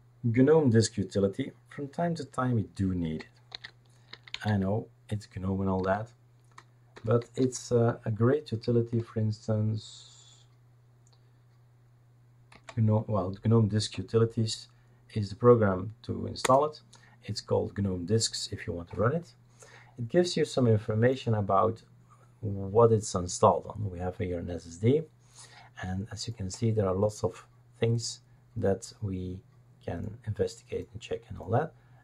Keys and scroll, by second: 3.5 shift+super+d, 4.1-4.4 typing, 5.8 typing, 6.9-8.1 typing, 9.0 Right, 12.5 Right, 16.4 Return.